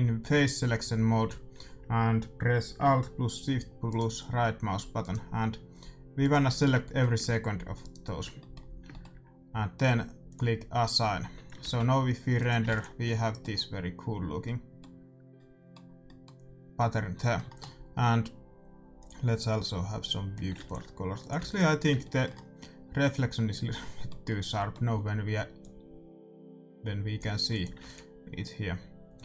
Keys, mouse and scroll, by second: 1.1 a, 1.4 a, 1.5 a, 4.7-9.6 right drag, 6.6-10.8 middle drag, 10.2-14.3 drag, 11.1 Tab, 11.7-16.1 middle drag, 11.7 shift+z, 12.6 ctrl+s, 18.9-23.4 drag, 20.5 s, 21.3 ctrl+s, 21.9-23.4 middle drag, 25.5-29.2 drag, 27.8 ctrl+s.